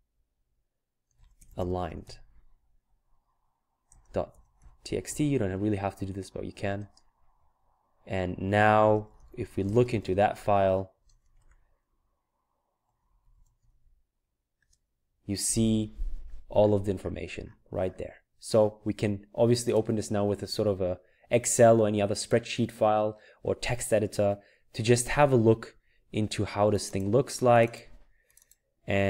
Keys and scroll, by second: 0.8-2.5 typing, 3.7-5.5 typing, 6.8 typing, 8.6-11.9 typing, 13.0-15.1 typing.